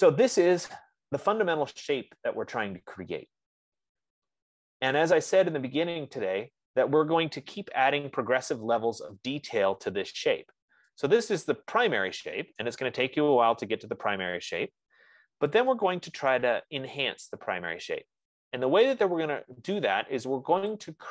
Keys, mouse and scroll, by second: 0.3-5.3 right drag, 5.5-10.3 right drag, 8.5 F15, 11.6 F15, 12.8-17.6 right drag, 17.6 middle click, 17.7 middle click, 17.8 middle click, 18.0 middle click, 18.1 middle click, 19.0 middle click, 19.1 middle click, 19.3 middle click.